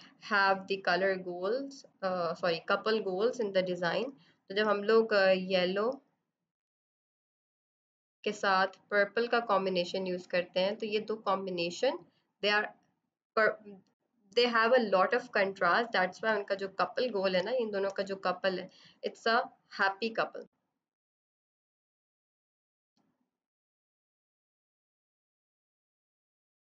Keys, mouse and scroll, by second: 0.6 click, 3.8 b, 5.4 alt+click, 6.2 click, 8.5 click, 9.2 click, 16.2 z, 16.7 click, 17.3 space, 17.4 click, 18.9-20.2 typing, 20.4 click, 21.4 ctrl+z, 22.1 alt+click, 23.4 right click, 24.1 click.